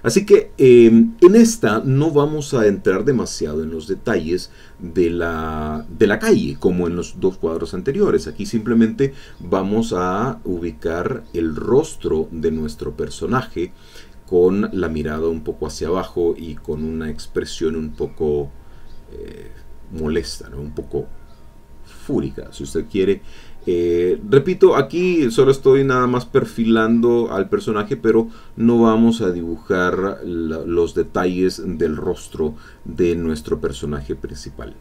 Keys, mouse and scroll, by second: 4.4 click, 4.8 click, 7.9-9.0 drag, 9.2-10.9 drag, 11.4 click, 12.9-14.1 drag, 14.7-16.3 drag, 16.4-19.1 drag, 19.4-22.9 drag, 22.9-23.3 scroll up 1, 23.3 click, 24.2-26.6 drag, 26.9-28.0 drag, 28.2 click, 30.1 click, 30.6 click, 31.1-32.2 drag.